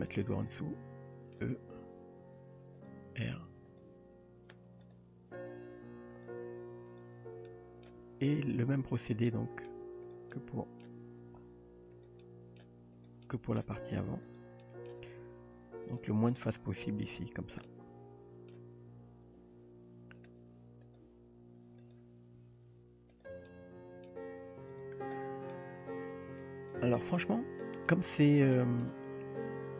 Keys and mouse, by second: 0.1-1.4 middle drag, 2.0 e, 3.2 r, 3.9 g, 6.2 click, 7.0 click, 7.5 middle click, 8.0 g, 9.3-9.7 middle drag, 10.1 click, 10.3 middle click, 11.2 g, 12.2-12.6 middle drag, 13.3-13.6 middle drag, 13.8 g, 14.6 middle drag, 15.9 click, 17.1 click, 17.7-18.5 middle drag, 19.6 e, 20.4 r, 21.0 g, 22.4 s, 23.5-24.1 middle drag, 24.2 g, 25.5-26.4 middle drag, 26.7 shift+middle click, 27.6 middle click, 28.2 Tab, 28.6-28.9 shift+middle drag.